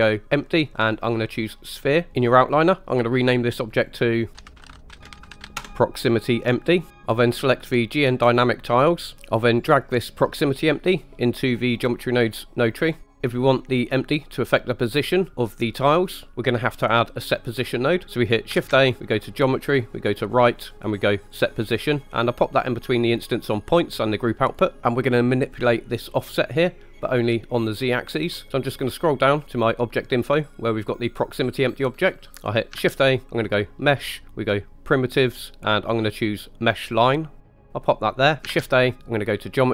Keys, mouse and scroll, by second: 3.7 click, 3.9-5.6 drag, 8.3 click, 10.3-12.9 drag, 13.0 middle click, 18.6 shift+a, 24.5 click, 24.9-26.4 drag, 27.2 click, 28.6 middle click, 29.6-29.9 scroll up 1, 30.4 click, 32.8 shift+a, 38.5 shift+a.